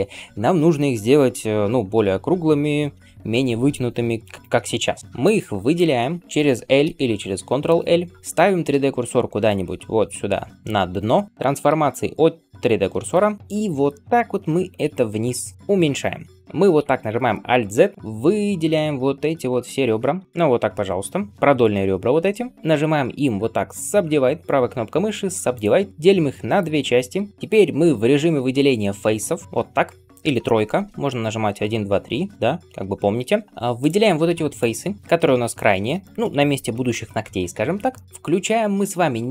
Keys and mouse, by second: 5.1-16.4 drag, 6.7 ctrl+l, 9.4 shift+right click, 14.4 s, 16.7 alt+z, 17.9-27.3 drag, 17.9 2, 22.9-35.3 middle drag, 22.9-27.3 right drag, 29.4-33.7 drag, 30.6 3, 31.4 2, 31.7 1, 33.1 3, 35.3 shift+click, 35.4-39.3 shift+middle drag.